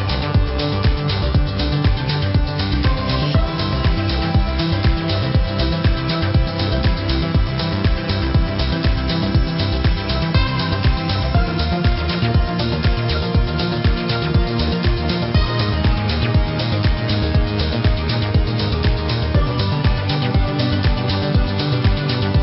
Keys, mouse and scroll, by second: 3.9 a, 4.2 click, 6.7 click, 8.7 click, 12.3 click, 13.4 click, 16.0 v, 18.2 click.